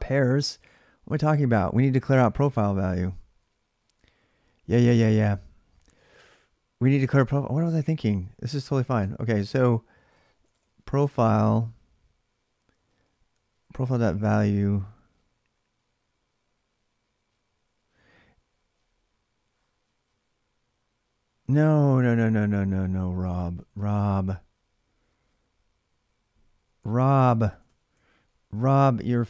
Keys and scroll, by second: 0.0-0.6 typing, 2.8 ctrl+[, 3.0 k, 3.2 k, 4.2-5.7 typing, 7.0 typing, 8.8-10.9 typing, 13.2-14.6 typing, 21.8-23.3 typing, 26.3-29.2 typing.